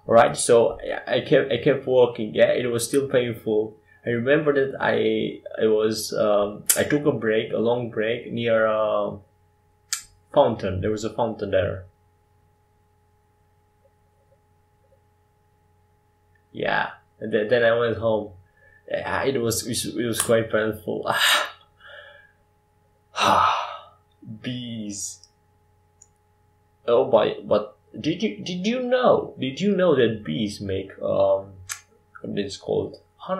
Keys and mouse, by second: 0.5 g, 1.9 g, 4.3 g, 12.6 shift+d, 19.7-21.8 middle drag.